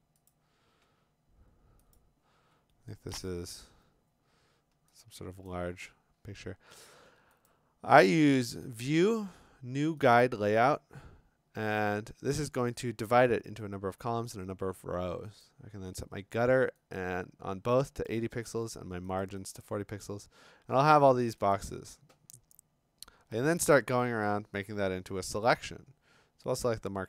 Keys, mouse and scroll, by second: 0.3 click, 2.0 click, 5.5 click, 7.5 click, 10.1 click, 12.7 click, 15.5 click, 17.0 click, 18.1 click, 19.2 click, 19.5 click, 21.5 click, 23.5 click, 23.8 click, 25.4 m.